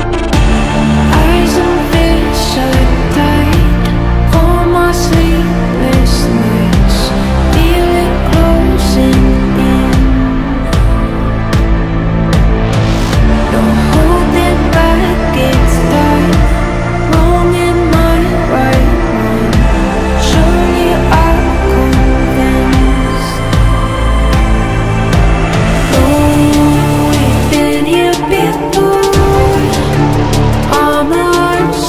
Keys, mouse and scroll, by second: 4.2 ctrl+j, 5.5-6.7 drag, 6.5 typing, 6.7 ctrl+t, 7.6-9.8 drag, 10.8 click, 11.1-12.6 typing, 12.4-18.4 drag, 18.4 v, 18.9-21.6 drag, 25.1 click, 26.5 alt+scroll up 1, 26.9 alt+scroll down 1, 27.5 click, 29.4 scroll down 1, 31.4 click.